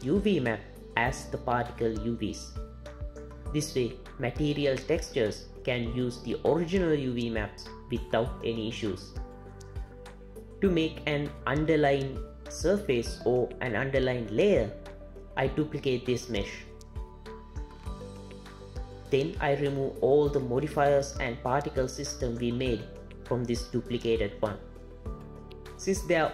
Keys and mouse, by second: 16.2 shift+d, 17.9 z, 22.0-23.2 drag, 23.5-26.3 drag.